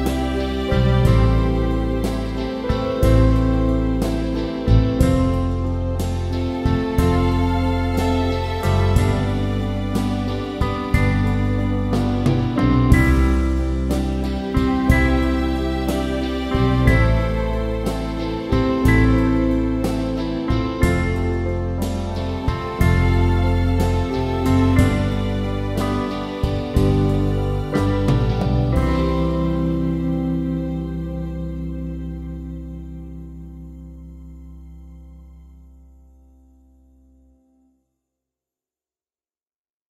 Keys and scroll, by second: 11.5 ctrl+alt+shift+e.